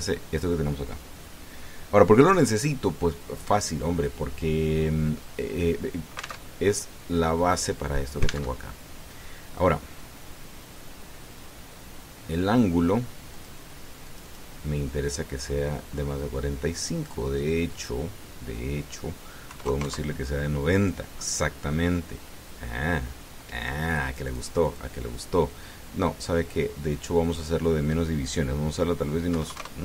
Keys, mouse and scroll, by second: 0.6-0.9 scroll down 1, 4.7 middle click, 5.4 middle click, 7.3 alt+Tab, 9.3 alt+Tab, 14.1 click, 14.8 click, 15.8-18.1 drag, 18.5 click, 20.3 KP_9, 20.4 KP_0, 20.6 KP_Enter, 24.6-25.7 drag, 28.0 click.